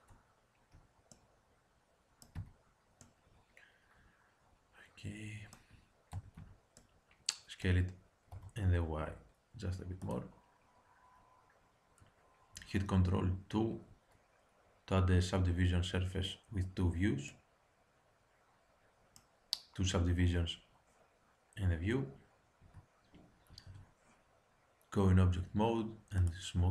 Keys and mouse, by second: 1.0 middle click, 2.3 z, 2.9 middle click, 3.1 middle click, 4.7 middle click, 6.1 a, 6.3 a, 7.1 middle click, 8.2 s, 13.3 ctrl+2, 17.2 middle click, 17.4 middle click, 22.6 Tab, 26.1 click.